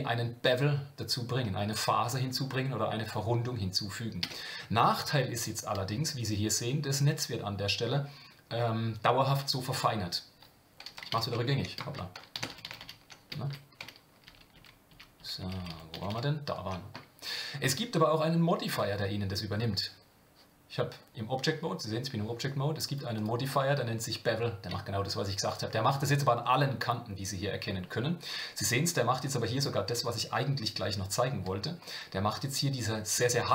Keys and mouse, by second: 4.2 Tab, 12.3 z, 15.4-16.7 ctrl+z, 17.7 Tab, 22.9 click, 23.1-25.6 drag.